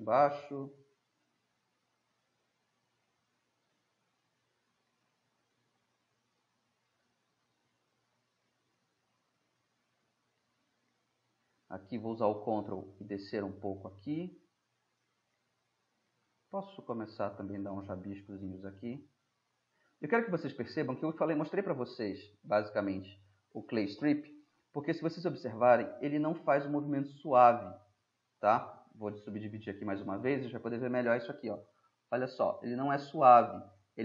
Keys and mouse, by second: 0.2 drag, 2.2-4.5 drag, 4.5 middle drag, 4.6 drag, 4.8-5.4 middle drag, 5.4-6.8 drag, 9.1 click, 9.3-10.6 middle drag, 10.6 click, 10.8-11.7 middle drag, 12.5-13.1 middle drag, 13.9-15.4 middle drag, 16.6-19.5 middle drag, 19.5-19.9 drag, 19.9-21.4 middle drag, 22.0-24.1 middle drag, 30.3-34.0 drag.